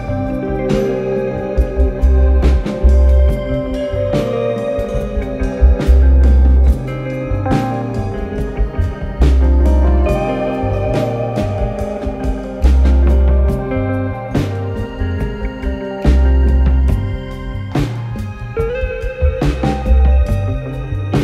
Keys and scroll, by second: 2.2 Return, 13.7 3, 18.9 ctrl+z.